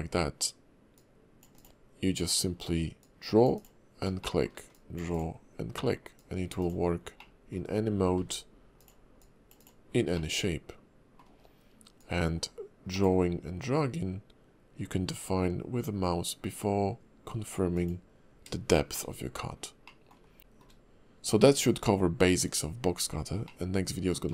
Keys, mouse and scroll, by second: 0.9 click, 3.0 click, 4.2 shift+middle click, 4.7 click, 6.1 click, 7.2 middle click, 8.2 d, 9.2 click, 10.1 middle click, 11.4-12.0 scroll down 1, 12.0 click, 18.7 shift+middle click, 19.4-19.8 scroll up 2, 19.8 middle click, 20.2 scroll down 2, 20.4 shift+middle click, 23.4 middle click.